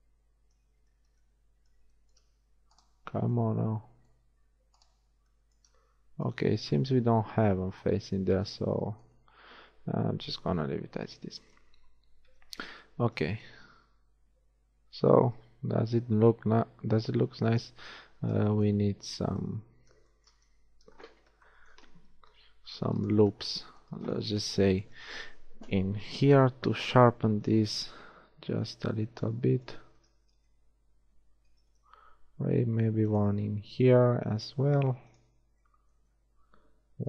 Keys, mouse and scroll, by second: 4.4-6.6 middle drag, 12.5 Tab, 19.6 KP_1, 20.8 Tab, 22.3 ctrl+Tab, 26.2 ctrl+r, 30.6 Tab, 31.7 Tab, 32.8 ctrl+r.